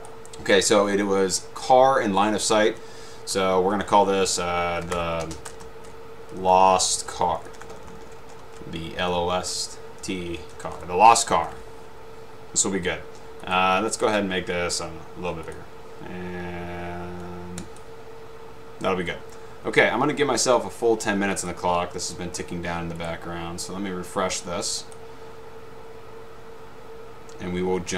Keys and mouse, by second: 0.2 click, 5.0-11.4 typing, 13.5 click, 15.6 click, 17.7 click, 21.5 click, 23.1 right click, 25.0 click.